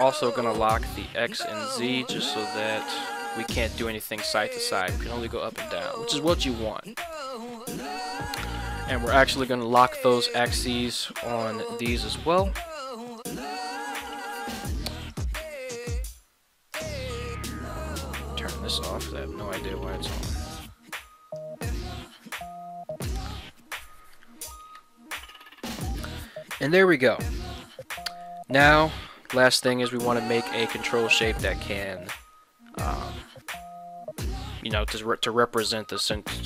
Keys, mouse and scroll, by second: 0.7 click, 1.4 click, 2.5 g, 3.0 z, 6.1 click, 7.1 alt+g, 10.8 click, 11.4 click, 12.1 click, 13.1 click, 13.8 click, 15.1 right click, 16.7 click, 17.2 click, 18.7 click, 20.5-21.3 drag, 25.1-25.6 middle drag, 26.1 shift+middle drag, 26.5 middle click, 27.5 click, 28.0 middle click, 28.9 KP_1.